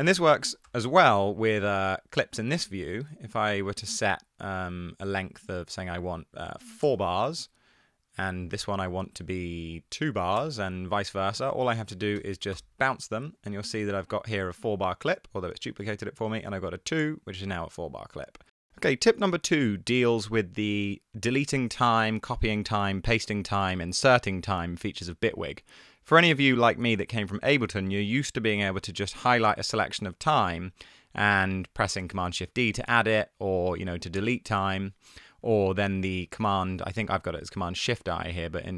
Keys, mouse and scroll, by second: 0.8 BackSpace, 0.8 Tab, 6.5 4, 6.8 Return, 10.3 2, 10.4 Return, 12.6 super+b, 28.8 2, 32.1 shift+super+d, 33.3 super+z, 34.3 shift+super+z, 34.9 super+z.